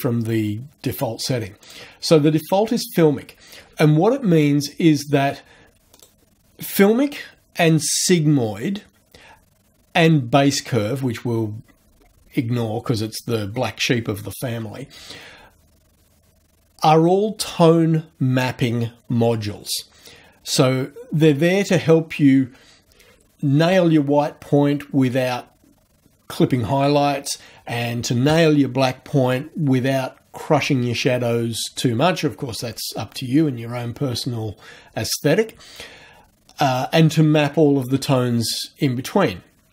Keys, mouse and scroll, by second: 1.7 click, 2.4 click, 6.0 click.